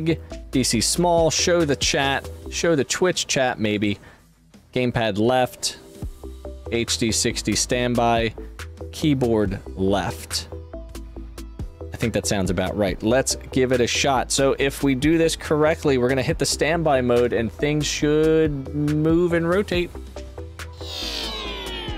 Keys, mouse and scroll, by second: 0.4 click, 1.6 click, 3.6 click, 5.3 click, 7.4 click, 7.4 right click.